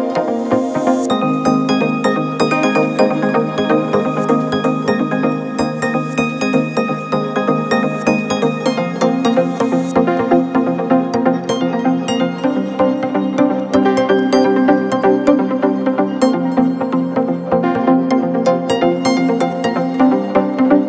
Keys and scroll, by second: 12.3 Delete.